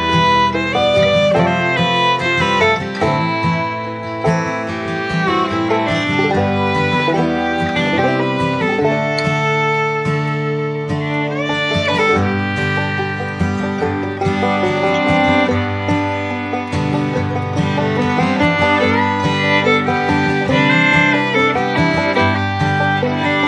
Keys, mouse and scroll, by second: 0.0 ctrl+click, 15.4 right click, 18.9 Right.